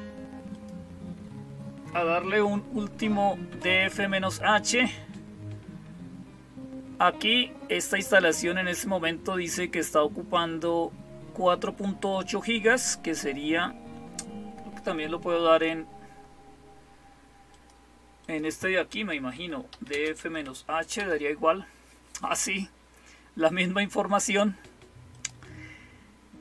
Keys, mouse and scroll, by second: 0.4 click, 17.4 click, 18.1 click, 19.0-20.8 typing, 25.0 click.